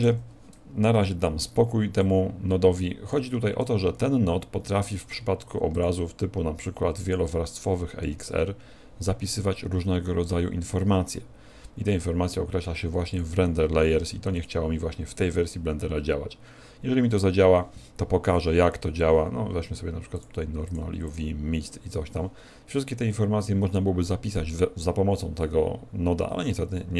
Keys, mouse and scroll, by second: 0.0 F12, 7.1 click, 20.2 click, 20.6 click, 21.1 click.